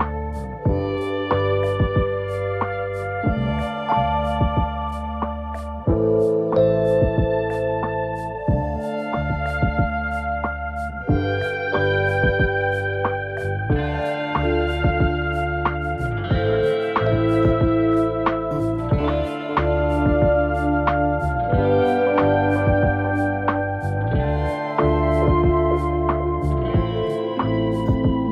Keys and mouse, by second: 0.3 ctrl+r, 1.2 Escape, 1.2 right click, 1.4 a, 1.6 a, 1.7 ctrl+r, 2.6 middle click, 3.0 shift+middle click, 3.4 a, 3.8 right click, 3.8 a, 4.8 middle click, 4.8 m, 5.3 right click, 5.8 right click, 6.4 m, 6.9 shift+middle click, 7.3 middle click, 8.1 right click, 8.8 m, 9.5 click, 10.2 m, 10.7 middle click, 11.2 right click, 11.7 m, 12.1 right click, 13.4 m, 14.2 shift+middle click, 14.5 middle click, 15.0 a, 15.2 middle click, 15.2 a, 15.5 ctrl+r, 16.8-18.3 typing, 17.0 middle click, 17.4 Tab, 17.8 middle click, 18.3-19.2 middle drag, 19.4-20.8 typing, 19.6 middle drag, 20.3 middle click, 20.8 Tab, 21.0 middle click, 21.7 click, 22.1 a, 22.7 click, 22.9 Tab, 23.2 a, 23.3 a, 23.3-25.5 middle drag, 26.0 alt+h, 26.3 a, 26.5-27.2 middle drag, 26.5 a, 28.2 right click.